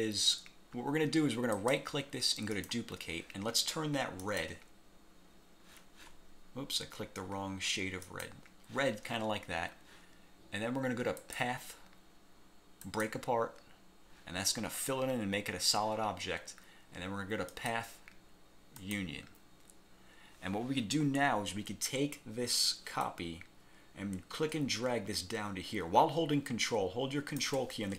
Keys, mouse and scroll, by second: 1.6 click, 2.6 click, 4.3 click, 8.2 click, 11.4 click, 13.0 click, 17.7 click, 18.9 click, 23.2-27.7 ctrl+drag.